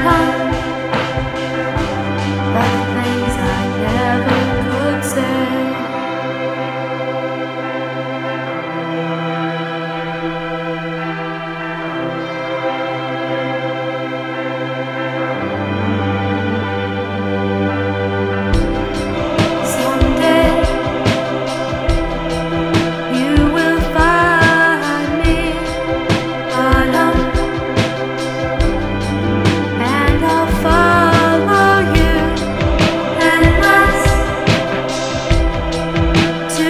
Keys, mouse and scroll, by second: 2.3 click, 11.0 ctrl+alt+[, 11.3 ctrl+alt+p, 12.7 F9, 15.3 F9, 19.4 n, 22.4 click, 23.3 n, 25.8 KP_5, 27.7-29.4 shift+middle drag, 29.9 KP_1, 31.9 KP_5, 35.6 r.